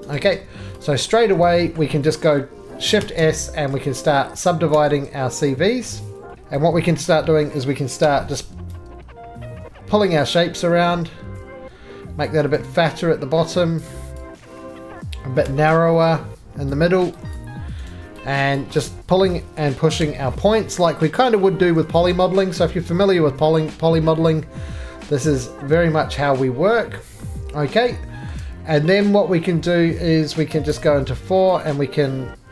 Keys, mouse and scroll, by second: 0.2 right click, 0.4 scroll, 0.4 3, 0.8 click, 1.1-1.4 scroll, 1.4 shift+middle click, 1.5 shift+middle click, 1.8 shift+middle click, 1.9 shift+middle click, 3.0 s, 3.3-4.1 scroll, 3.7 middle click, 4.0 s, 4.7 s, 6.3 middle click, 6.9 click, 7.4 middle click, 8.0 g, 12.2 click, 12.6 right click, 13.1 middle click, 14.2 click, 15.4 g, 16.6 click, 17.4 click, 17.9 right click, 18.6 click, 19.3 middle click, 20.0 g, 21.9 click, 22.1 right click, 22.5 middle click, 22.7-23.3 scroll down 1, 26.3 middle click, 26.4 scroll down 2, 26.6-27.2 scroll, 27.2 middle click, 27.3-28.5 scroll, 27.9 shift+middle click, 28.3 shift+middle click, 29.6 middle click, 29.9-30.5 scroll, 30.5 scroll, 30.5 4, 30.8 click, 31.6 click.